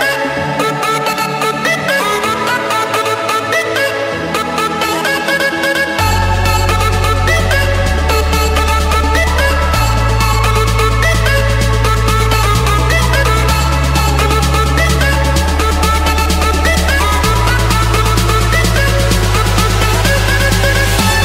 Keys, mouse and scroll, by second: 0.9 click, 6.8 click, 7.2 scroll, 7.6 scroll down 7, 7.6 scroll, 7.9 scroll down 1, 8.1-8.8 scroll, 9.5 scroll down 10, 10.2 click, 10.4-10.9 scroll down 6, 11.4 scroll, 11.6 click, 13.1 click, 16.6-17.7 drag, 18.8 click, 19.0 middle click, 19.1-19.8 scroll, 20.2-21.2 scroll.